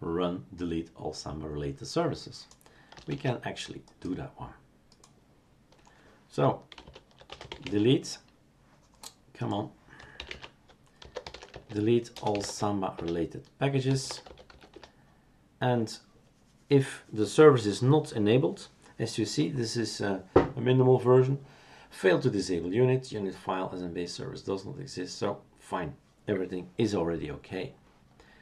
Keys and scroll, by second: 3.1 shift+super+q, 6.7-7.6 typing, 10.2-15.0 typing, 12.9 Return.